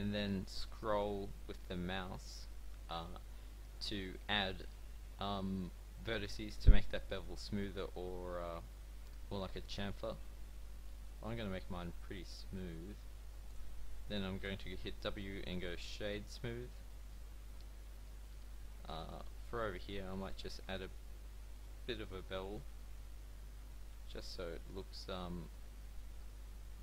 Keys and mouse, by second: 14.4 w, 17.7 a, 21.7 middle click, 26.1 w.